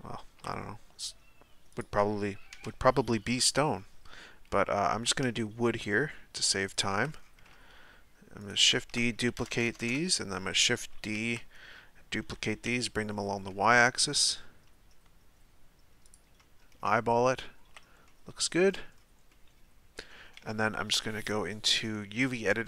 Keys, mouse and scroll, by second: 0.3 shift+d, 2.5 KP_Decimal, 3.2-4.9 scroll up 6, 4.9 g, 7.1-7.5 scroll down 1, 7.5 shift+middle click, 8.4 shift+right click, 9.4-9.8 ctrl+KP_Add, 10.5-11.2 shift+middle drag, 11.2 shift+d, 17.9 z, 18.0-18.6 middle drag, 18.6-19.3 scroll down 5, 19.3-22.5 middle drag, 22.5-22.6 scroll up 4.